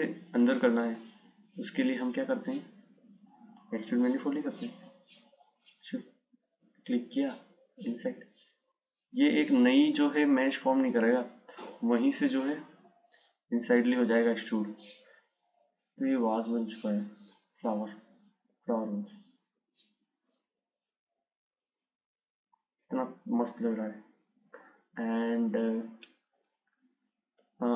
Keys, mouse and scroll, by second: 1.2-4.4 drag, 5.1 click, 6.9 click, 11.5 click, 16.4 click.